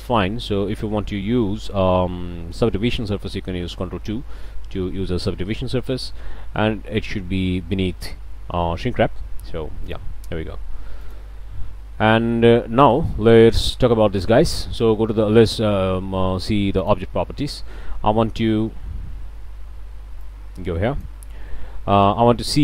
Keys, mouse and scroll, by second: 1.4 Tab, 3.7 ctrl+2, 4.5 Tab, 9.8 click, 11.0 drag, 12.8-13.2 drag, 13.3 scroll up 1, 13.6-14.4 shift+middle drag, 16.8 middle click, 20.2 click, 22.4-22.6 drag.